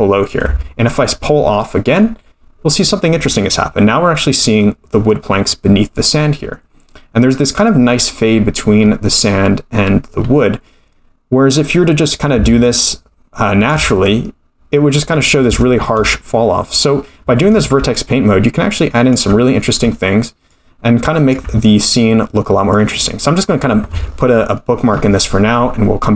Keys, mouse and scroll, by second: 4.3-5.1 scroll up 3, 5.1-6.2 middle drag, 6.6-7.6 scroll down 3, 7.6 middle click, 8.3-10.1 scroll up 6, 10.1-10.6 scroll down 1, 10.6-11.6 scroll down 2, 11.6 middle click, 12.4 ctrl+click, 15.1-15.5 scroll up 3, 15.6 shift+middle click, 15.9-17.0 scroll down 1, 17.0-17.6 scroll down 2, 17.9 ctrl+click, 20.5 ctrl+click, 21.7-22.4 scroll down 1, 22.4 middle click.